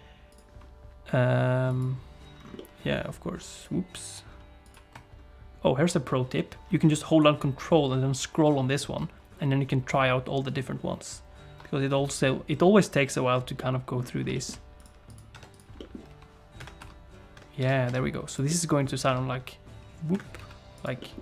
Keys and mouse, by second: 0.3 click, 2.6 middle click, 3.5-4.7 drag, 13.6 middle click, 14.3 shift+middle click, 15.2 click, 15.3 Tab, 15.5 click, 15.8 middle click, 16.1 g, 16.8 r, 17.6 g, 18.5 middle click, 19.1 r, 20.4 s, 21.0 middle click.